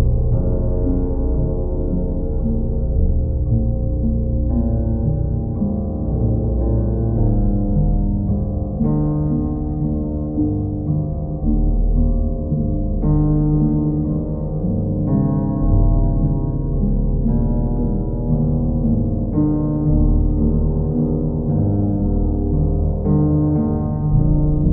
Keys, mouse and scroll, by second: 0.0 ctrl+click, 0.5 alt+click, 3.2 alt+click, 3.8 ctrl+click, 6.2 ctrl+click, 7.1 ctrl+click, 8.9 ctrl+click, 10.5 alt+click, 16.5 click, 16.7 ctrl+z, 17.9-19.0 ctrl+drag, 23.9 click, 24.5 click.